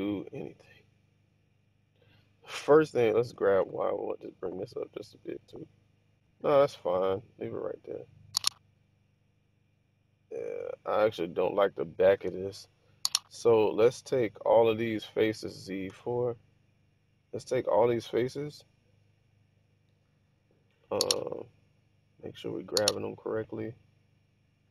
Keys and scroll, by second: 1.0-1.7 typing, 3.6-3.9 typing, 12.2 Tab, 12.4 6, 15.6 z, 15.9 4.